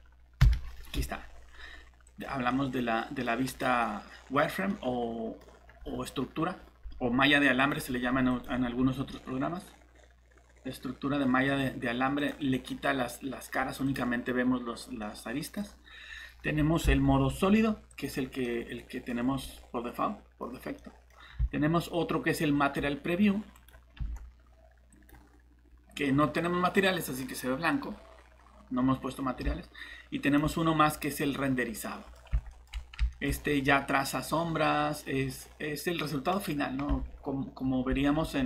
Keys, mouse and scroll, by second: 0.4 shift+z, 2.1 click, 2.5 middle click, 3.5 click, 3.8 middle click, 7.6 click, 9.1 middle click, 11.4 scroll up 1, 12.2 click, 14.7-15.0 scroll down 1, 15.0 middle click, 16.8 z, 17.9 click, 18.4 middle click, 19.1 scroll down 1, 19.4 middle click, 20.4 scroll up 1, 20.8 middle click, 21.4-22.7 typing, 23.5 click, 24.0 z, 26.0 middle click, 26.8 typing, 27.9 scroll down 1, 28.3 scroll up 1, 29.2-30.4 typing, 30.2 click, 31.8 middle click, 32.2 scroll down 1, 32.5 middle click, 33.3 scroll up 1, 33.6 middle click, 34.7 scroll down 1, 35.2 middle click, 36.9 alt+shift+Tab, 37.9 alt+Tab.